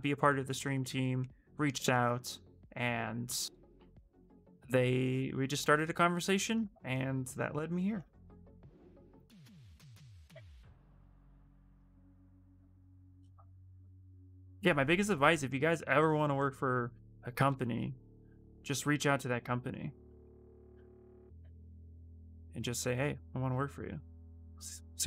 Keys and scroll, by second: 22.6 ctrl+z.